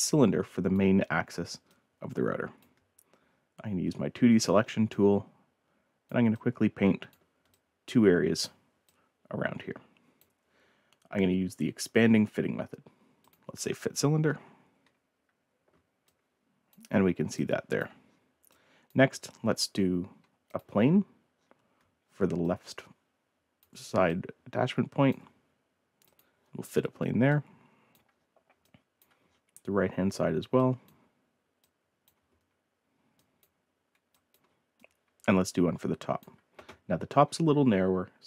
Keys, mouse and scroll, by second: 0.0-0.7 drag, 1.1 scroll down 2, 1.7-2.6 drag, 3.3 ctrl+scroll up 2, 3.8-4.8 ctrl+scroll down 6, 4.9-6.1 ctrl+drag, 6.3 click, 7.5-8.4 ctrl+drag, 8.8-10.2 drag, 13.2 click, 16.0-16.7 drag, 16.9 scroll down 2, 17.3-17.7 drag, 18.0 scroll up 1, 18.4-18.8 drag, 19.1 scroll up 1, 20.4 click, 20.9 scroll down 1, 21.3 scroll up 2, 22.0 ctrl+scroll down 2, 22.4-23.6 ctrl+drag, 24.0-25.1 ctrl+drag, 26.0 click, 27.3-27.9 drag, 28.1-28.5 scroll down 1, 28.6-29.0 drag, 29.2 middle click, 30.6 ctrl+click, 31.5 ctrl+drag, 32.2 ctrl+click, 32.7 ctrl+click, 33.3 click, 33.9 scroll up 1, 34.0-34.3 scroll down 2, 34.7-36.2 drag, 36.8 scroll up 1.